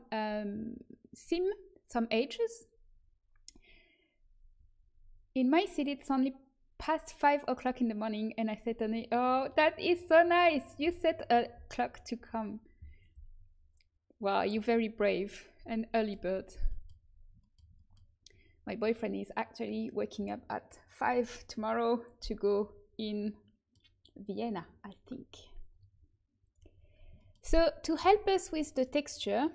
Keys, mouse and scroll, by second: 23.8-25.6 middle drag, 26.4 click, 26.7 right click, 27.2 click.